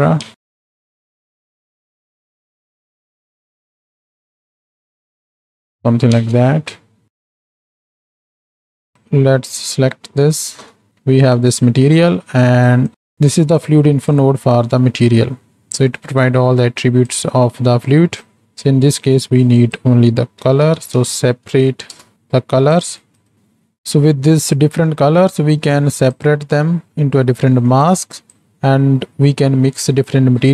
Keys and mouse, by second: 0.3 ctrl+space, 1.1 n, 1.9-2.2 drag, 2.3 ctrl+click, 3.0 ctrl+click, 3.2 shift+click, 3.9-4.3 shift+drag, 4.6-5.2 shift+drag, 5.4 click, 5.7 n, 6.2 ctrl+space, 7.0 z, 7.4 z, 8.9 ctrl+space, 8.9 n, 10.6 Home, 11.3 middle click, 11.9 middle click, 12.6 click, 12.9 click, 13.5 click, 15.4 middle drag, 16.2-17.1 drag, 17.7 middle click, 18.2 click, 19.2-22.8 drag, 23.0 click, 27.9-30.5 drag.